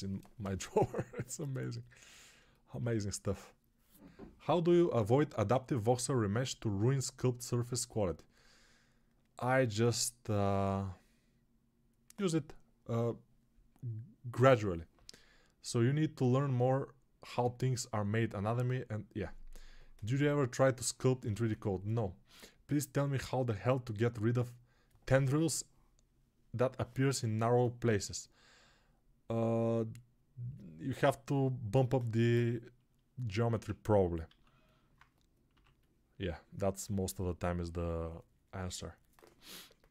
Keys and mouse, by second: 34.2 alt+q, 35.4 6.